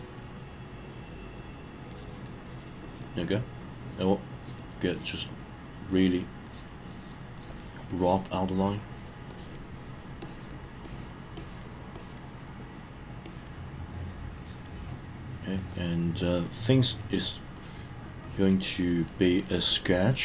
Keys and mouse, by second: 1.9 click, 2.4 click, 2.9 click, 3.7 click, 4.3 click, 4.8 click, 6.0 click, 6.4 click, 6.9 click, 7.4 click, 7.9 click, 8.6 click, 9.3 click, 10.2 click, 10.8 click, 11.3 click, 11.9 click, 13.2 click, 14.4 click, 15.6 click, 16.2 click, 16.8 click, 17.1 click, 17.5 click, 18.2 click, 18.8 click, 19.4 click, 19.7 click.